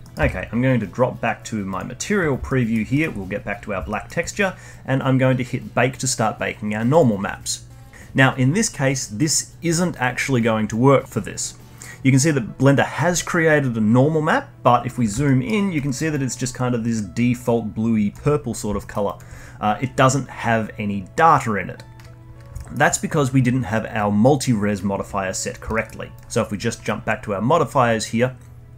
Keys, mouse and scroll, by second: 0.0 middle click, 0.1 z, 2.4-6.9 alt+middle drag, 6.9-7.9 drag, 14.7-15.2 scroll up 2, 15.2 middle drag, 15.7-16.1 alt+middle drag, 16.1-18.4 alt+drag, 18.4 scroll down 1, 18.7 alt+middle drag, 19.0-22.0 alt+drag, 22.1-22.5 scroll down 1, 22.5-25.5 alt+middle drag, 25.7-26.1 alt+middle drag, 26.1 alt+click.